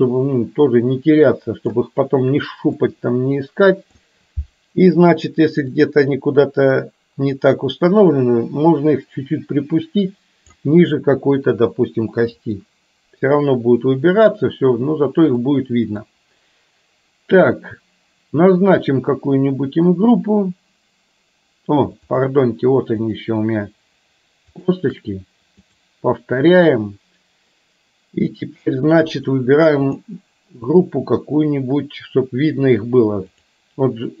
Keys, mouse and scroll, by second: 2.9-4.1 middle drag, 5.9-10.7 drag, 12.7-13.3 middle drag, 15.4 middle click, 22.2 shift+click, 23.1 shift+click, 25.7-26.2 drag.